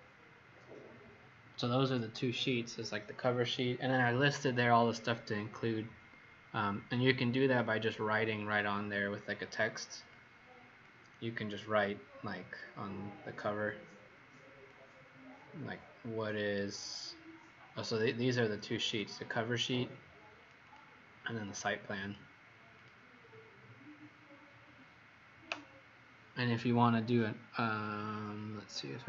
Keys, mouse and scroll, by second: 8.8 click, 24.4-26.8 scroll up 1.